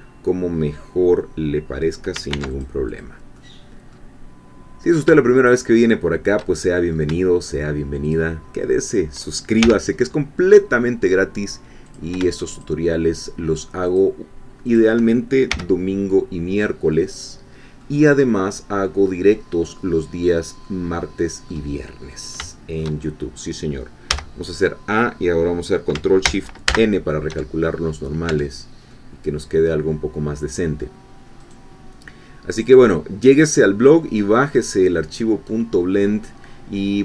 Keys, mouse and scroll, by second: 2.3 ctrl+r, 2.5 ctrl+click, 3.4 ctrl+middle click, 5.0 shift+click, 6.5 shift+middle click, 8.1 shift+click, 9.6 shift+f, 10.0 middle click, 12.0 click, 12.6-14.2 shift+drag, 14.8 shift+click, 15.5 f, 16.9-18.1 middle drag, 18.1-18.8 scroll down 1, 18.8-19.8 middle drag, 20.1-20.6 scroll down 1, 20.4 middle click, 20.6-21.6 drag, 21.8 middle click, 21.8-22.4 scroll down 1, 22.5-24.1 shift+drag, 24.1 a, 26.7 ctrl+shift+n, 28.3 Tab, 28.9 click, 29.0-31.0 middle drag, 31.4 right click, 32.5 click, 33.4-37.0 middle drag.